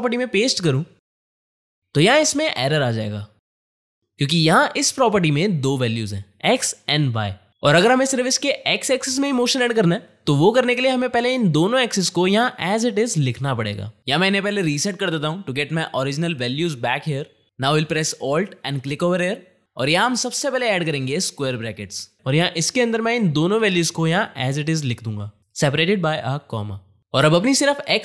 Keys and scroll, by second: 1.7 ctrl+v, 21.6 Left, 23.8-24.7 typing, 26.2 KP_5, 26.4 4, 26.7 0.